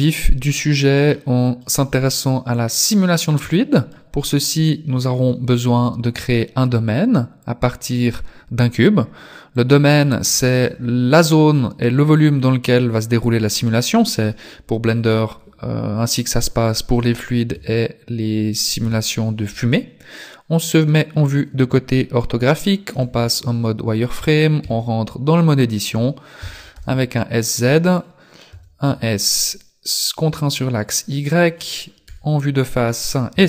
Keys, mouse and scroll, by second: 0.6 scroll down 2, 1.1 middle click, 1.8 scroll down 6, 2.8 middle click, 3.6 shift+middle click, 5.3 shift+a, 9.6 click, 17.6 KP_3, 18.8 KP_5, 23.0 z, 23.4 scroll up 2, 24.0 scroll up 1, 24.6 Tab, 26.4 s, 28.5 s, 32.2 KP_1, 33.3 s.